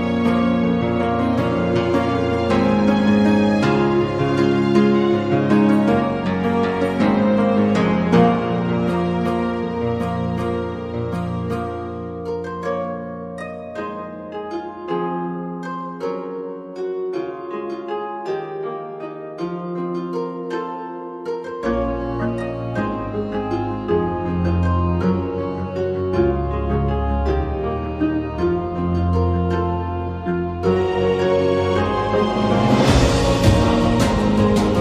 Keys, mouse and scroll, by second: 0.1-1.4 drag, 1.6 g, 4.9 Tab, 4.9 click, 5.2 a, 5.3 a, 5.7 a, 6.5 Tab, 7.5 Tab, 9.1 ctrl+r, 13.0 s, 14.8 ctrl+r, 20.9 s, 21.1 ctrl+z, 24.4 ctrl+r, 26.4 a, 26.9 alt+shift+click, 28.1 r, 28.5 click, 29.9 g, 30.9 shift+Tab, 31.6 g, 33.4 1, 33.5 click, 34.6 ctrl+b.